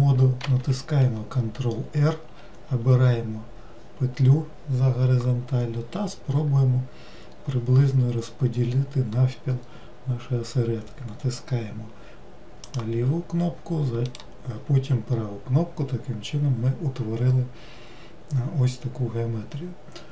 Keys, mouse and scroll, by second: 0.4 ctrl+r.